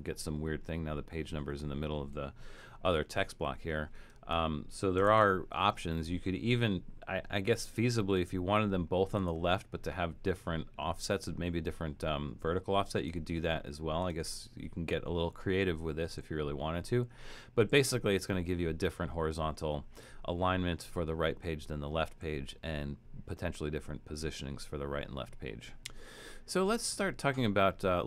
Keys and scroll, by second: 3.0 super+z, 5.1 shift+Return.